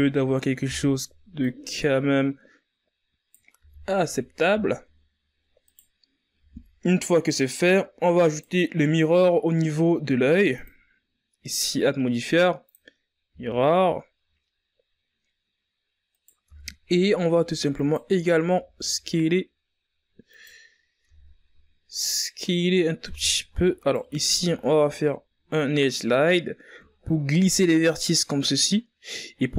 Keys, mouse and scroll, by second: 0.2-0.9 scroll down 4, 0.9-1.5 shift+scroll up 4, 1.9 right click, 2.7 a, 2.9-4.0 scroll down 5, 4.0-4.5 scroll up 4, 4.5 right click, 6.8-9.6 drag, 9.6 a, 10.0-10.5 scroll down 3, 10.5-12.4 scroll up 7, 12.4 right click, 12.8 Tab, 14.0 alt+right click, 14.7 s, 17.3 Tab, 19.4 Tab, 20.1 alt+right click.